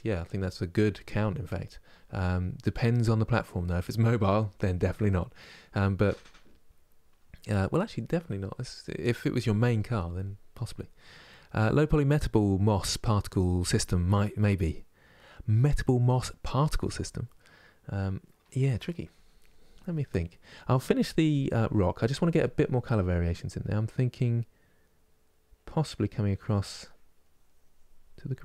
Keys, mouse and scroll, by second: 25.1-26.6 drag, 26.6 middle click, 27.0-28.4 drag.